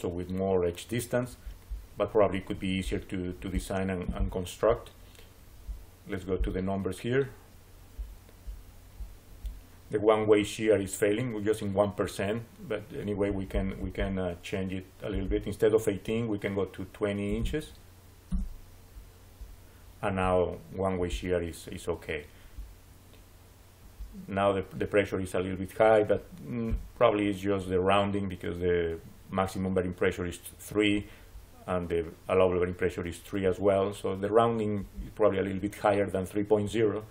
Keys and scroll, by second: 16.8-17.7 typing, 18.1 Return.